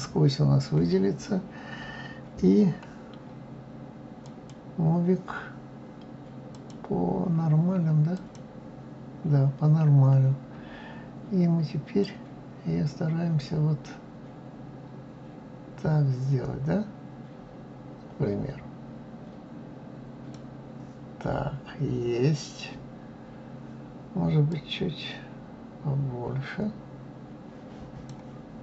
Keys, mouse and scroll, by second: 4.2-9.5 drag, 10.2-12.0 scroll up 2, 12.0-15.0 drag, 24.5-27.5 drag.